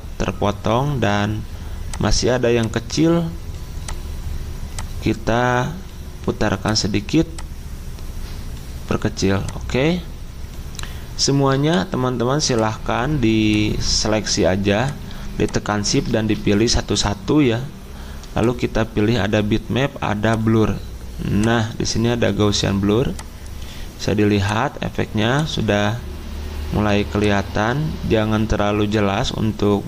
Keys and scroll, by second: 16.2 ctrl+z.